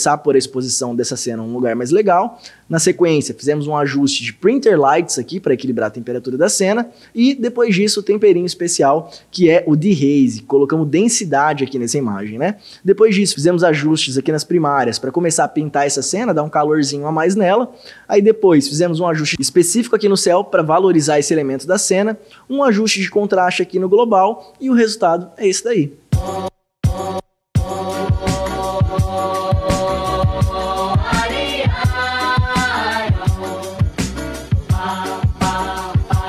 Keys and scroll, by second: 2.9 ctrl+d, 8.3 ctrl+d, 16.2 ctrl+d, 19.3 ctrl+d, 19.5 ctrl+d, 23.3 ctrl+d, 26.2 space.